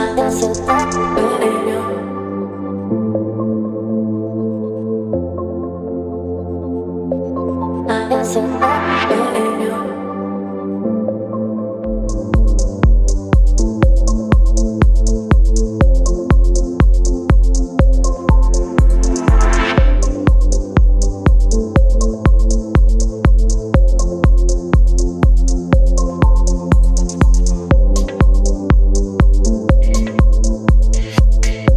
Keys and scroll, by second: 0.9 ctrl+BackSpace, 1.7 ctrl+d, 2.9 space, 7.9 ctrl+BackSpace, 8.4 ctrl+d, 12.6 space, 15.2 Delete, 15.7 space, 18.0 Delete, 18.4 space, 21.4 Delete, 23.2 space, 24.1 v, 25.3 ctrl+t, 30.3 Return.